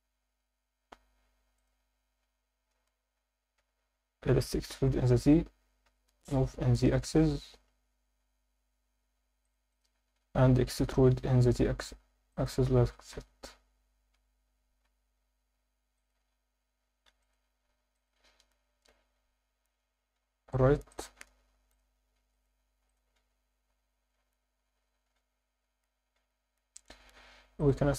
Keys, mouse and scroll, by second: 1.5 shift+click, 3.6 Escape, 4.4 e, 4.7 z, 5.9 Escape, 6.2 g, 6.6 z, 9.4 click, 9.7 click, 12.3 click, 13.1 z, 14.1 Escape, 14.4 g, 14.8 z, 15.9 click, 17.1 ctrl+r, 17.9 click, 18.1 Tab, 18.9 ctrl+2, 20.9 click, 21.7 click, 25.4 Tab, 25.4-27.6 scroll up 2, 27.6-27.9 drag.